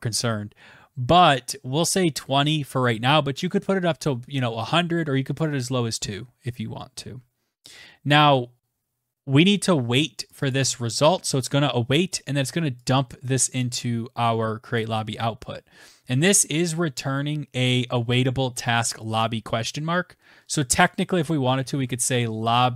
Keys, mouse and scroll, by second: 6.4 Return, 6.6 Return, 9.2 click, 9.3 click, 13.5 click, 19.5 click, 19.6 click, 20.3-22.3 typing, 20.4 click, 21.5 Tab.